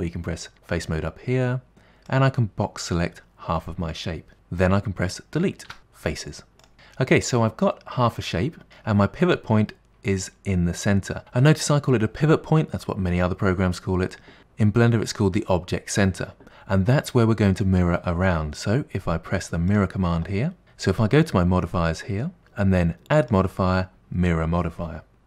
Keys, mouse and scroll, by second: 2.1 click, 5.7 Delete, 6.7-8.7 middle drag, 19.7 click, 22.4 click, 23.1-25.2 drag.